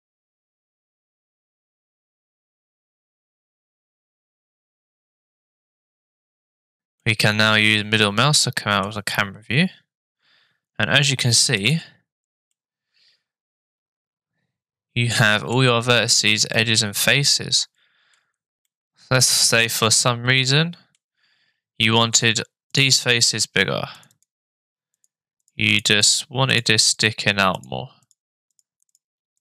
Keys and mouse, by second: 1.2 click, 1.9 click, 2.7 Tab, 3.6-5.1 middle drag, 5.5 shift+middle click, 7.2 shift+click, 7.4-8.9 shift+middle drag, 11.6 click, 12.5-15.6 middle drag, 16.6-18.2 middle drag, 18.7 middle click, 20.4 shift+middle click, 23.1 click, 24.2 shift+click, 25.4 shift+click, 25.7 shift+click, 26.1 shift+click, 26.5 shift+click, 27.0 shift+click, 27.6 shift+click, 28.0 shift+click, 28.5 shift+click, 28.9 shift+click.